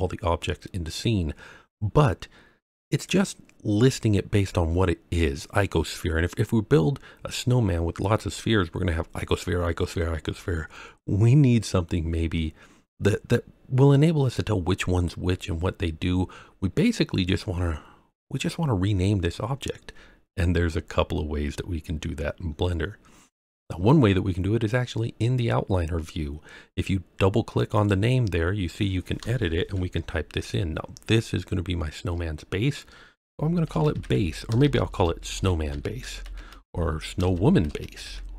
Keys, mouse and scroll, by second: 16.7-18.1 scroll up 3, 20.5-21.7 scroll down 3, 22.4-23.2 scroll up 3, 27.5 click, 27.7-38.3 drag, 34.6 BackSpace, 34.7 BackSpace.